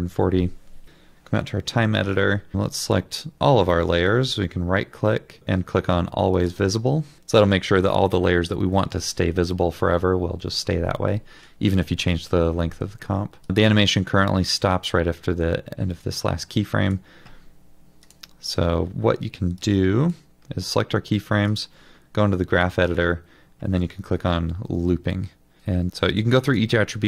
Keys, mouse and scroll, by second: 0.0-0.2 typing, 2.5-2.9 scroll down 1, 3.3 ctrl+a, 4.0 right click, 18.5 double click, 26.0 double click.